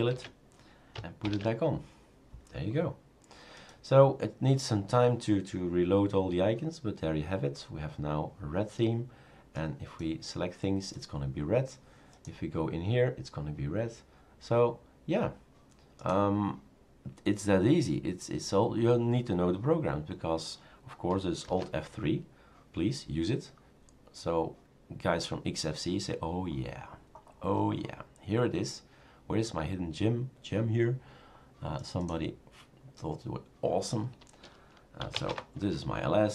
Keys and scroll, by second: 0.1 shift+super+q, 1.2 shift+super+q, 21.5 alt+F3, 34.9-35.6 typing.